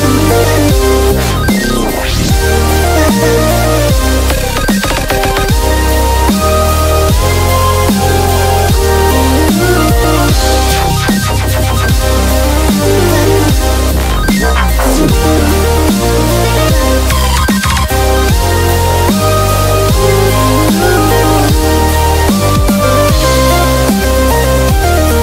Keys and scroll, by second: 0.7 super+i, 3.7 typing, 4.8-8.1 typing.